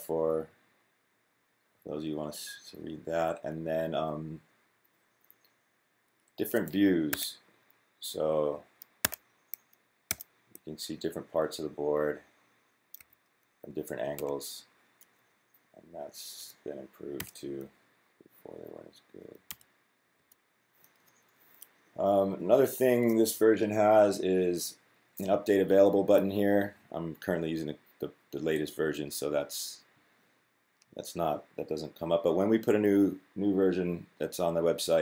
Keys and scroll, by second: 6.9 1, 8.8 1, 9.9-11.1 typing, 12.8 2, 13.8-14.7 typing, 16.7-17.5 typing, 19.3-20.5 typing.